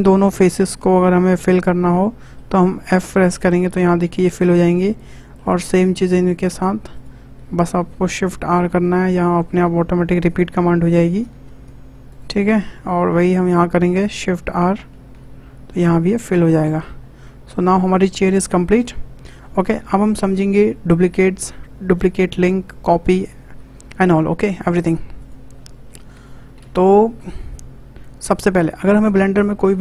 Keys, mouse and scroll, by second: 0.3 2, 0.8 click, 1.4 shift+click, 1.8-2.9 shift+middle drag, 2.9 f, 3.3-4.9 middle drag, 4.9 click, 5.1 middle click, 6.0 shift+click, 6.5 shift+click, 6.9 shift+click, 8.4 shift+r, 8.8 middle click, 9.6 scroll up 2, 10.2 click, 12.1 alt+shift+click, 14.9 shift+r, 15.7 scroll down 4, 16.0 click, 16.3 middle click, 17.0 scroll down 3, 17.2 middle click, 18.1 scroll down 2, 18.3 shift+middle click, 18.7 click, 18.8 Tab, 18.9 Tab, 19.6 scroll down 2, 19.8-23.0 middle drag, 24.5 click, 25.2 click, 26.6 ctrl+a, 28.8 click, 29.7 w.